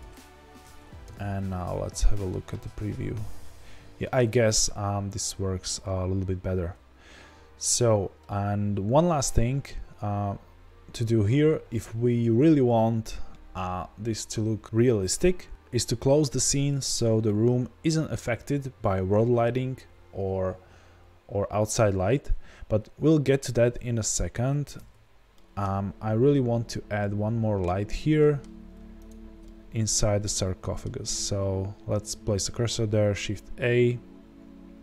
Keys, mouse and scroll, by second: 0.6 z, 1.0 KP_0, 24.6 z, 24.9 scroll up 2, 25.0-27.7 middle drag, 25.9-26.9 scroll up 2, 27.7-28.1 scroll up 2, 28.1-29.0 middle drag, 29.0 shift+right click, 29.4-31.0 middle drag, 30.8-31.6 scroll down 2, 31.6-34.8 scroll down 1.